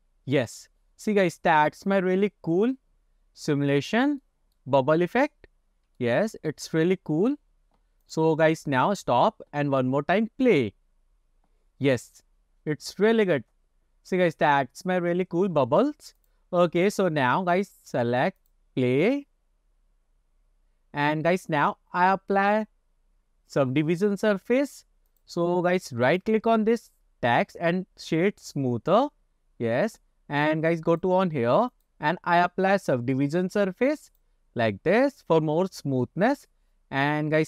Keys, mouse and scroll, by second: 2.9-3.8 scroll down 3, 4.3-4.7 shift+middle drag, 5.5 scroll up 2, 6.1-6.6 shift+middle drag, 8.1 click, 16.2 click, 16.8 click, 18.4 click, 25.1 click, 26.1 right click, 28.7 click, 31.0 click, 31.8-35.4 drag, 36.2 scroll up 2.